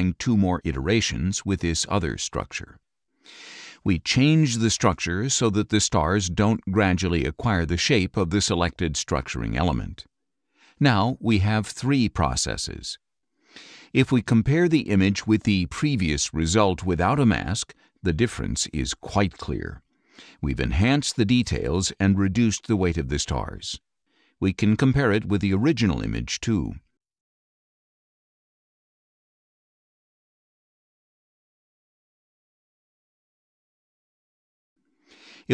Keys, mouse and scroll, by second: 1.4 click, 4.8 click, 10.7 click, 11.7 ctrl+Left, 16.1 ctrl+Right, 17.1 ctrl+Left, 17.7 ctrl+Right, 18.4 ctrl+Left, 19.2 ctrl+Right, 24.3-26.3 drag, 27.3-28.7 drag, 29.3 click, 29.6 ctrl+Left, 30.4 ctrl+Right, 31.0 ctrl+Left, 31.8 ctrl+Right, 32.5 ctrl+Left, 33.3 ctrl+Right, 34.0 ctrl+Left, 34.8 ctrl+Right, 35.4 ctrl+Left.